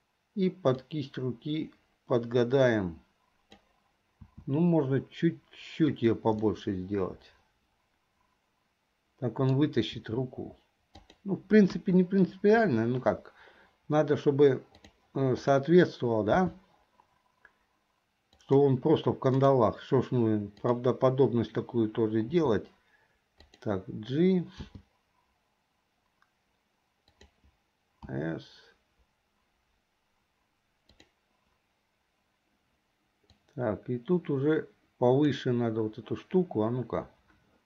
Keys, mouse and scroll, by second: 1.5-3.7 drag, 4.3 s, 6.5-9.7 middle drag, 10.5 s, 11.7 KP_1, 15.0 click, 16.4 c, 20.8 click, 22.4 s, 24.7 g, 28.3 s, 33.5 click, 35.1 click.